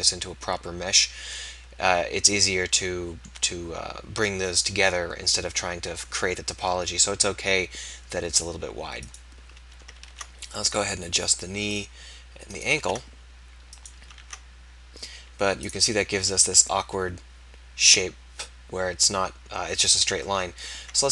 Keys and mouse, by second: 0.1-2.5 middle drag, 6.5-10.2 middle drag, 10.2 ctrl+a, 12.8 ctrl+a, 14.3 ctrl+a.